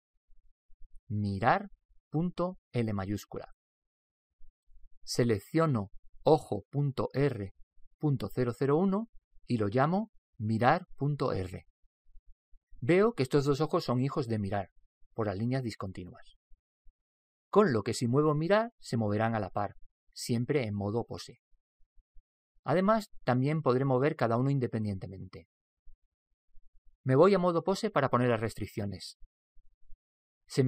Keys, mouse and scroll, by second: 6.3 right click, 7.6 click, 17.4-19.2 middle drag, 29.0 Tab, 29.4 Tab.